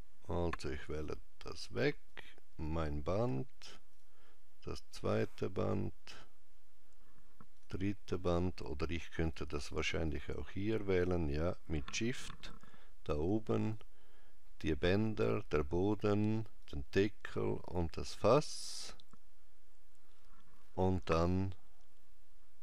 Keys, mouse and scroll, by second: 1.9 click, 3.7 shift+click, 7.4 shift+click, 9.0 click, 9.9 shift+click, 13.5 shift+click, 14.9 shift+click, 17.4 shift+click, 18.6 scroll down 2, 20.2 scroll down 1.